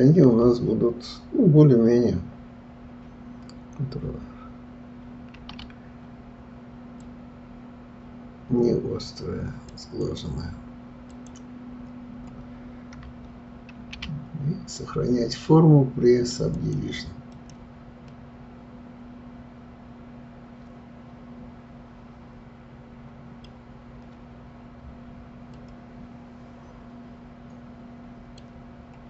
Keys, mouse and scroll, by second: 5.4 ctrl+r, 10.0 click, 11.1 click, 13.8 ctrl+r, 17.3 click, 18.1-21.1 middle drag, 24.3-25.4 scroll down 5, 25.4-28.5 middle drag, 28.5 scroll down 1, 28.8-29.0 scroll up 5.